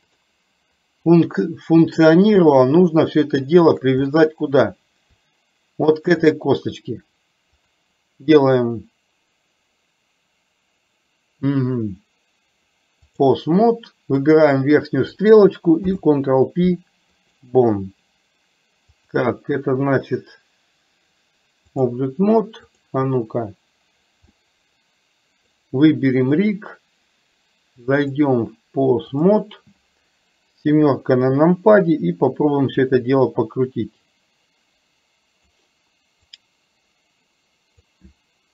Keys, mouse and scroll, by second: 0.2 click, 2.5-3.9 shift+middle drag, 4.1 middle click, 6.0 shift+click, 7.6-13.4 drag, 15.9 ctrl+p, 19.1-22.0 drag, 22.9 click, 24.5-25.5 middle drag, 26.5 click, 28.1-29.4 drag, 30.7 KP_7, 32.9-35.5 drag, 36.4-37.9 drag.